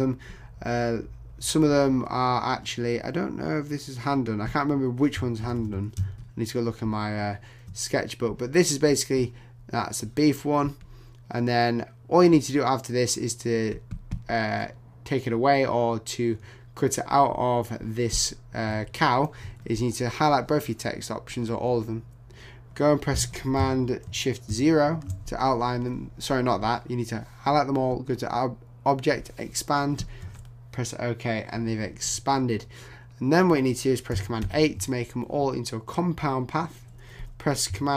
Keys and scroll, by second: 5.4 super+=, 24.5 shift+super+o, 30.2 Return, 34.4 super+8.